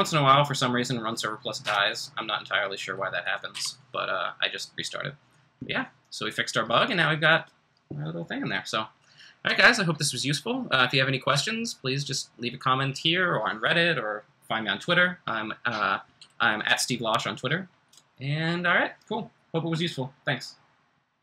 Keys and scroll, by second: 1.6 Return, 3.6 r.